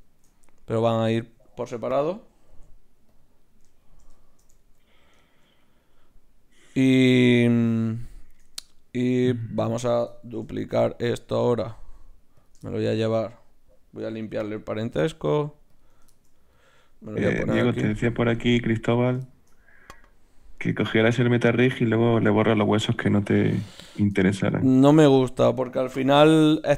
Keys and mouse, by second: 1.0-2.7 right drag, 2.5 ctrl+alt+s, 3.4 right click, 4.2-5.7 drag, 5.7 middle click, 6.6 right click, 10.6 shift+d, 14.7 alt+p, 16.5-17.8 drag, 17.3 g, 18.2 g, 19.2-20.8 drag, 20.8 e, 24.1-26.0 drag, 24.8 g, 26.0 KP_3.